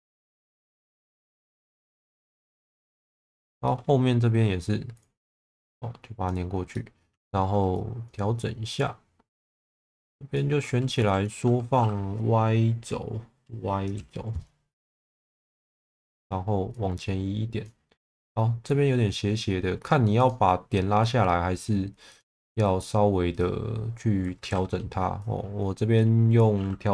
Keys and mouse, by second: 0.2 click, 1.3 shift+Tab, 2.9 middle click, 3.6 shift+middle click, 6.7 middle click, 7.9 click, 9.8 shift+click, 10.9 s, 13.9 y, 15.6 click, 20.1 click, 22.8 click, 24.5 ctrl+z, 25.2-26.3 drag.